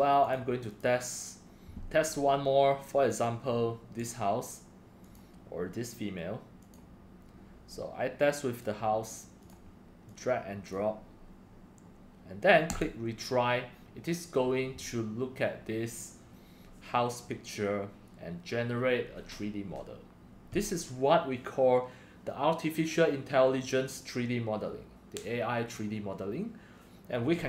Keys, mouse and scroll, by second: 0.2 click, 1.1 drag, 3.2 click, 3.5 click, 4.1 click, 6.8 click, 8.5 click, 9.4 click, 12.7 click, 13.7 Caps_Lock.